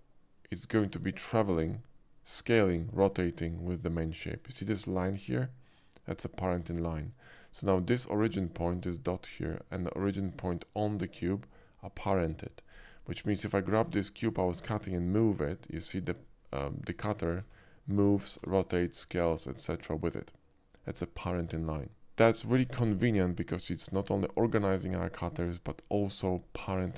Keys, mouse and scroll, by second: 3.4-8.9 right drag, 10.2 click, 13.1 click, 14.0 shift+middle click, 14.8 g, 16.9 right click, 17.3 s, 17.9-18.3 right drag, 18.3 r, 22.0-22.5 middle drag.